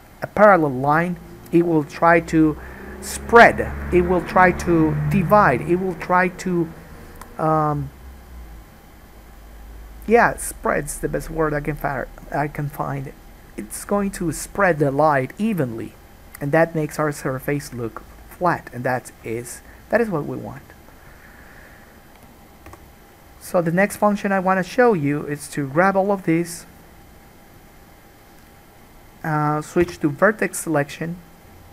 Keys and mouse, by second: 17.6-20.1 middle drag, 20.1-23.0 shift+drag, 22.9 3, 23.0 middle click, 23.1 shift+click, 23.6 shift+middle click, 24.2 shift+click, 24.7 shift+middle click, 25.2 shift+click, 25.6 shift+middle click, 25.8-31.7 shift+drag, 30.0 1.